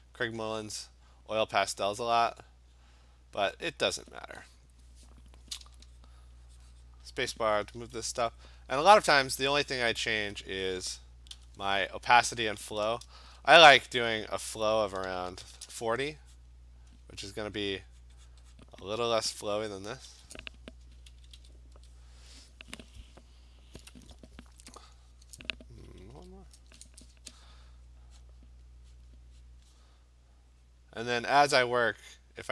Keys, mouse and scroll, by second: 3.4 click, 4.2 click, 8.0-11.8 typing, 13.5 shift+1, 15.4 shift+4, 16.5 click, 17.4 click, 17.7 click, 18.0 click, 18.3 click, 18.6 click, 19.4 ctrl+z, 19.7 ctrl+z, 20.1 ctrl+z, 21.1 ctrl+z, 21.4 ctrl+z, 26.0 ctrl+z, 27.4 click, 27.7 click, 28.2 click, 29.0 click, 29.1 click, 29.4 click, 29.5 click, 30.4 click, 30.7 click, 30.9 click, 31.2 click, 31.4 click, 31.6 click, 31.8 click, 32.1 click, 32.4 click.